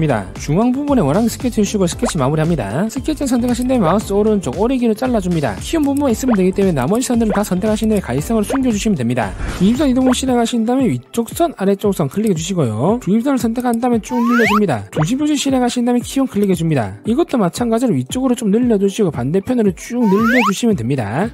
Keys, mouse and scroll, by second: 0.8 2, 1.5 click, 2.1 click, 2.9 click, 3.3 click, 3.9 right click, 5.2 click, 6.3 right click, 6.7 v, 7.3 right click, 7.7 v, 8.5 right click, 9.0 v, 9.4 click, 10.9 click, 11.6 click, 12.6 click, 14.2 click, 16.1 click, 17.1 click, 18.4-19.5 drag, 20.1 click, 21.1 click.